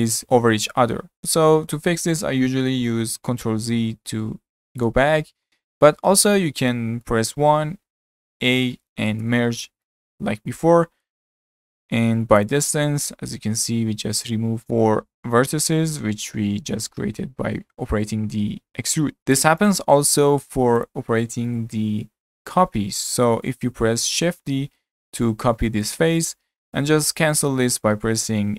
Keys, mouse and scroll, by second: 3.6 ctrl+z, 4.2 ctrl+z, 5.7-6.0 ctrl+shift+z, 6.7 middle click, 7.4 1, 8.4 a, 9.2 m, 19.2-19.7 middle drag, 19.7 click, 20.5 3, 20.8 click, 21.5-24.6 shift+middle drag, 24.6 shift+d.